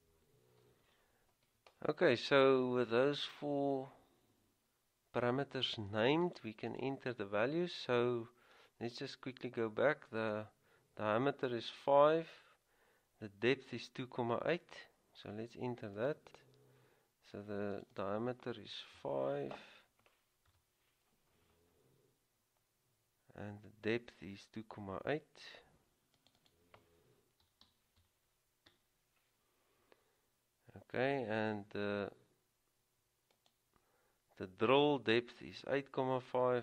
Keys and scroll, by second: 19.1 typing, 20.6 typing, 27.5-28.6 typing.